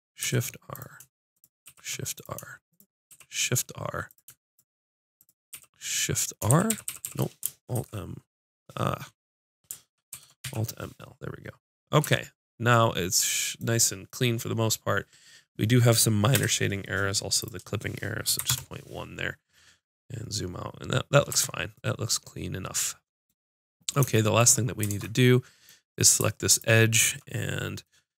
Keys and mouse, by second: 0.2 shift+r, 1.6 shift+r, 3.1 shift+r, 5.5-7.0 typing, 7.4 alt+space, 10.1 alt+m, 12.0 Tab, 16.3 n, 17.4-19.4 drag, 21.3 Tab, 24.9 ctrl+Tab, 26.4-27.7 drag.